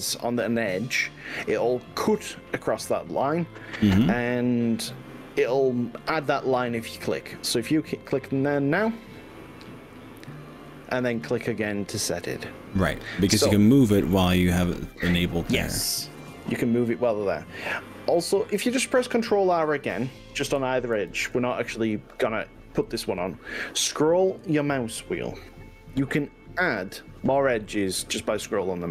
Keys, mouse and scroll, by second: 11.8 click, 21.0 ctrl+r.